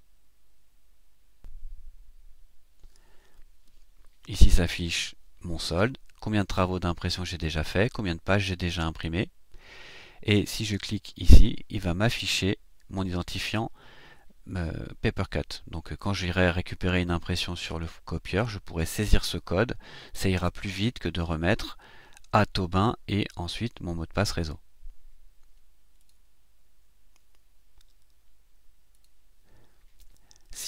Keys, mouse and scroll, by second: 26.0 click, 28.9 click.